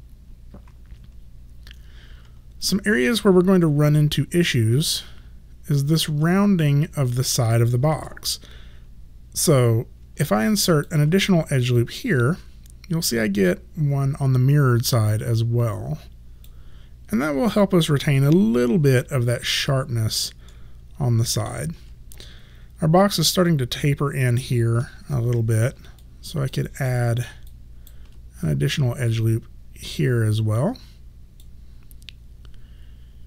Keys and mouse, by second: 2.7 alt+click, 10.3 alt+click, 18.1 3, 19.5 alt+click, 20.6 alt+middle click, 25.3 1, 26.1 alt+click, 26.9 alt+middle click, 27.6 alt+right click, 29.2 click.